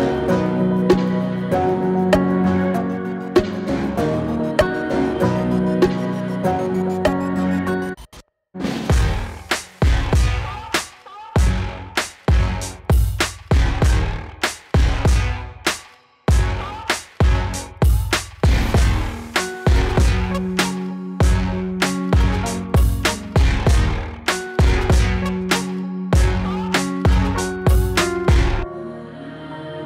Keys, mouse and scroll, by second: 0.5-3.0 drag, 5.9 click, 10.1 click, 10.8 ctrl+k, 13.3 Right, 24.6 ctrl+k, 24.7 Right, 25.1 click, 25.3 ctrl+k, 25.7 click, 28.0-28.6 click.